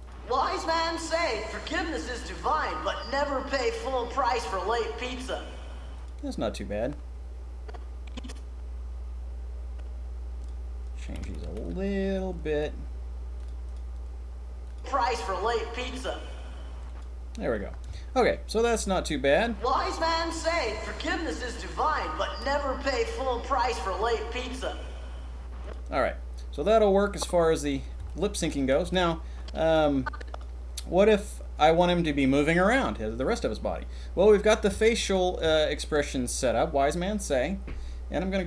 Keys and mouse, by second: 0.0 middle click, 5.9 click, 6.8 drag, 8.6 click, 11.0 a, 11.1 a, 11.4 b, 12.4 g, 13.6 click, 14.6 click, 16.8 click, 17.4 middle click, 17.6 middle click, 18.7 drag, 19.3 click, 25.6 click, 26.5 click, 27.9-29.3 shift+middle drag, 29.3-30.4 drag, 34.7 shift+middle click, 34.7 shift+drag, 35.0 shift+middle click, 35.3 middle click, 35.4 shift+click, 35.7 shift+middle click.